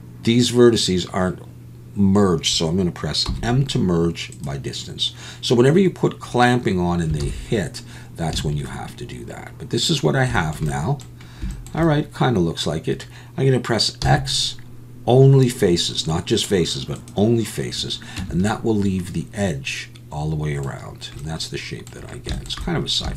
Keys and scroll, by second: 3.3 m, 7.2 alt+a, 8.3 a, 14.0 x, 18.2 Tab.